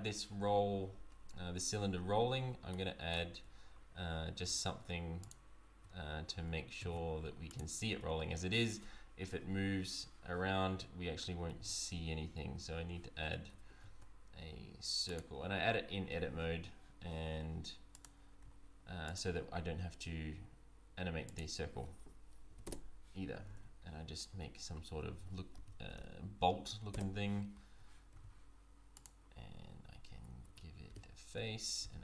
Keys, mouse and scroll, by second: 2.7 middle click, 3.3 Tab, 4.5 alt+click, 6.0-6.3 scroll up 1, 6.8 shift+s, 7.9 Tab, 11.5 shift+a, 13.2 Tab, 13.7 shift+a, 17.9 click, 19.1 click, 21.3 click, 23.5 Tab, 24.3 Tab, 25.2 r, 28.1 s, 30.1 Tab, 30.5 Tab, 30.9 f, 31.8 e.